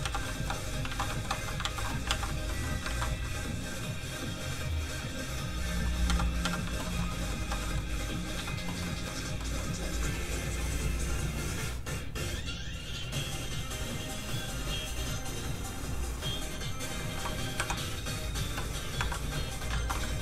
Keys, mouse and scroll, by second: 0.0 z, 0.2 shift+middle click, 0.9 alt+shift+z, 1.1 shift+middle click, 1.3 alt+middle click, 1.6 alt+shift+z, 2.1 alt+z, 2.5 middle click, 2.9 ctrl+s, 3.7 click, 6.1 z, 6.8 shift+middle click, 7.1 middle click, 7.2 middle click, 7.4 z, 7.6 middle click, 8.3 z, 8.8 shift+middle click, 9.1-9.4 scroll down 1, 9.4 middle click, 17.1 2, 17.6 3, 19.0 1, 19.3 middle click, 19.7 alt+shift+z, 20.1 middle click.